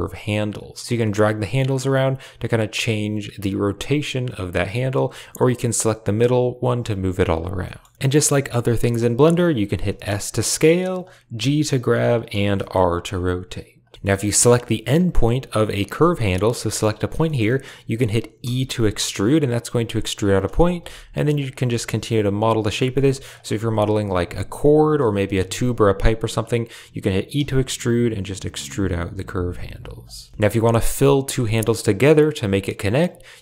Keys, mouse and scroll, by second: 0.8 click, 0.9 g, 4.7 click, 5.0 g, 7.6 shift+click, 7.8 click, 9.7 s, 11.3 g, 12.5 r, 13.9 shift+click, 14.4 g, 16.4 g, 17.2 shift+middle click, 17.4 middle click, 18.3 e, 20.7 r, 21.5 g, 22.7-25.2 typing, 23.2 click, 25.0 click, 26.3 click, 27.3 e, 30.2 shift+click, 31.5 shift+middle click.